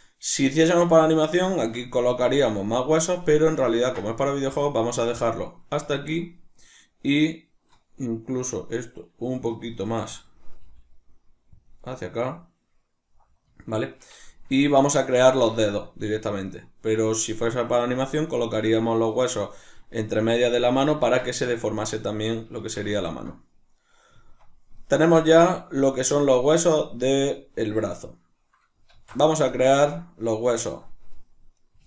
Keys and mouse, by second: 2.4-8.3 middle drag, 8.3 right click, 9.8-11.7 shift+middle drag, 10.6 g, 11.7 click, 12.1-20.5 middle drag, 20.9-31.6 middle drag, 28.9 alt+o, 31.6 right click.